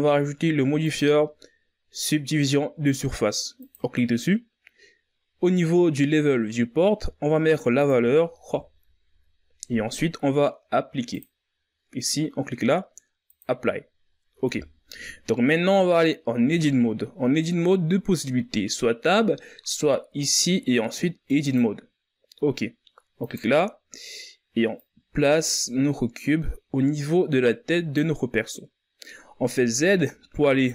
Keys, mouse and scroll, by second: 0.8-3.9 drag, 7.8-10.8 drag, 11.1-14.2 drag, 14.7-18.3 shift+scroll up 6, 20.2-27.9 drag, 29.7 z.